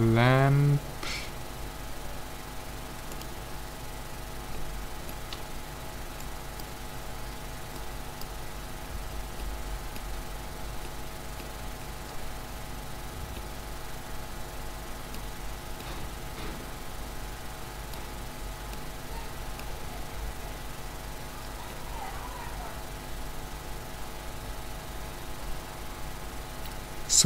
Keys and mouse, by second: 5.5 z, 6.2-9.7 drag, 10.0 z, 15.0 middle click, 16.1 click, 16.3 click, 17.6 middle click, 18.2 click, 20.0-22.0 middle drag.